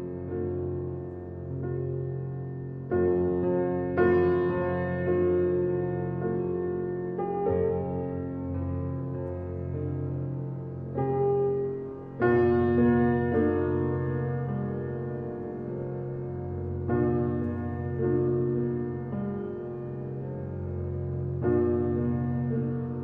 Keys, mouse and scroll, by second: 0.4 click, 1.1 scroll up 1, 1.2-6.6 middle drag, 6.6 s, 9.2-12.2 middle drag, 12.8 g, 19.1-22.2 middle drag.